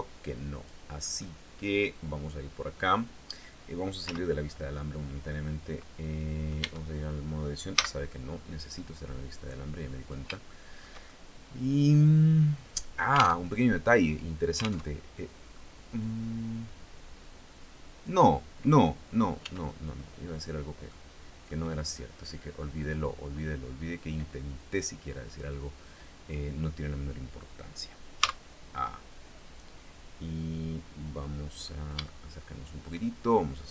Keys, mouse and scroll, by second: 0.6-3.0 middle drag, 3.6 z, 4.1 scroll up 2, 4.9-6.3 middle drag, 6.2 Tab, 7.3 z, 7.7 middle click, 9.5 click, 10.1 shift+middle click, 10.6-12.9 shift+middle drag, 12.9 alt+Tab, 14.4 alt+Tab, 15.1-17.9 drag, 19.0 s, 19.9 click, 20.5 click, 22.3 click, 27.7 a, 31.2-31.5 scroll up 3, 31.5 shift+scroll down 2, 31.6-32.6 shift+middle drag.